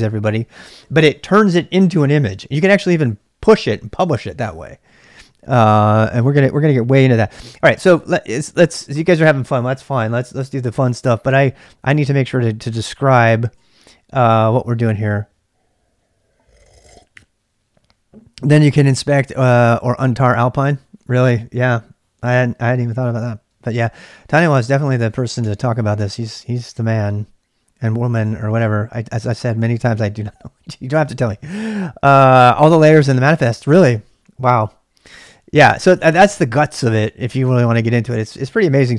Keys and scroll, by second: 24.8 ctrl+[, 25.0 k, 25.4 k, 26.1 k.